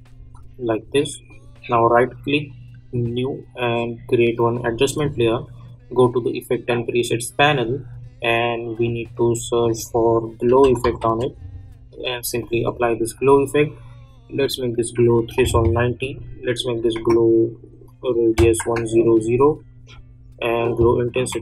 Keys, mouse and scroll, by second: 0.1 space, 1.2 click, 1.7 right click, 2.9 click, 8.8 click, 10.2-11.5 typing, 12.2 click.